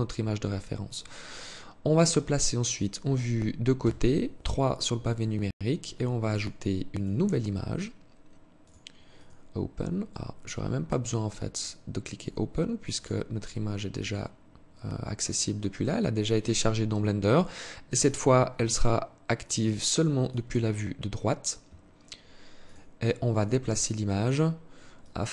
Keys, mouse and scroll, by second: 3.2 KP_3, 5.6 click, 6.2 click, 8.4 click, 11.0 click, 12.3 click, 17.4 click, 22.0 click, 22.7 click, 23.2-24.3 scroll down 2, 24.3 click.